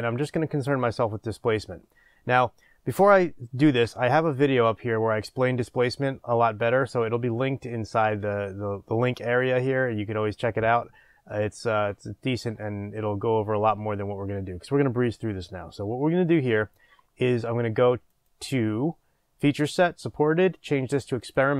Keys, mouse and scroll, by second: 18.1-21.5 drag.